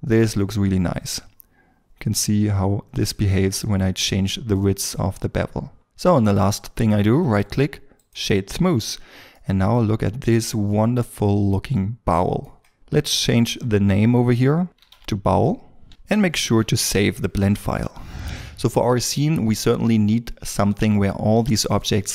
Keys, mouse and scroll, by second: 0.9 shift+click, 5.5 scroll down 1, 5.6 shift+middle click, 7.1 right click, 8.5 scroll down 1, 9.3 middle click, 13.3 double click, 14.6-15.3 typing, 15.6 scroll down 1, 15.9 middle click, 16.6 ctrl+s.